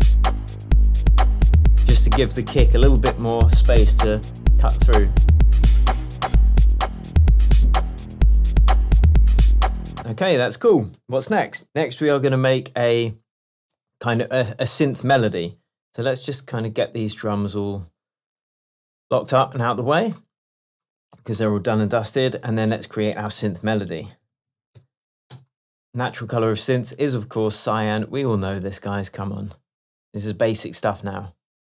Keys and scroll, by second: 10.1 space, 10.3 super+s, 22.3 shift+super+t, 23.5 super+r, 24.1-25.3 typing, 25.4 Return.